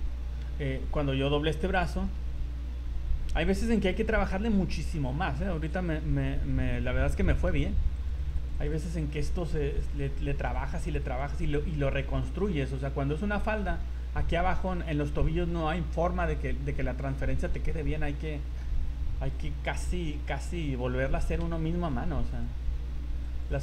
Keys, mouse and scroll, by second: 1.0 right click, 1.9 r, 4.7 shift+middle click, 5.1 scroll down 2, 5.6 r, 6.7-7.2 scroll up 6, 7.2 shift+middle click, 7.6 scroll up 2, 7.9 click, 8.3 click, 8.6 click, 8.8 click, 9.0 click, 9.4 click, 9.6 click, 9.8 click, 10.2 click, 10.4 click, 10.6 click, 10.8 click, 11.2 click, 11.4 click, 11.6 click, 12.0 click, 12.2 click, 12.6 click, 12.7-13.6 scroll down 13, 13.6 shift+middle click, 14.6 shift+middle click, 16.8 scroll down 3, 17.3 shift+middle click, 17.7-18.1 scroll up 8, 18.4 shift+middle click, 18.7 scroll up 2, 19.3 right click, 19.9 right click, 20.5 right click, 20.9 scroll up 2, 21.6 shift+middle click, 22.0 scroll up 3, 22.3 click, 23.3 click, 23.5 click.